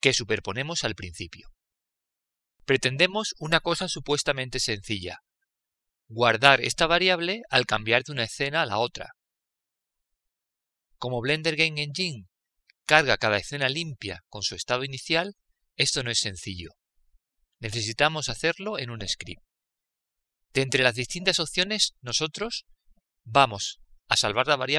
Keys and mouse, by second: 1.8-5.1 drag.